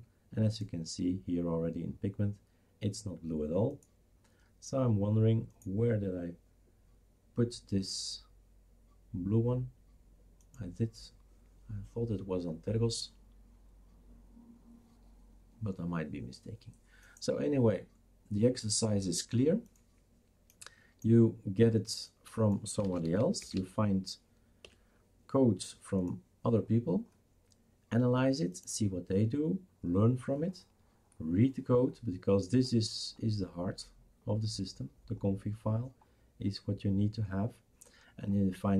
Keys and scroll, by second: 22.6-24.6 typing.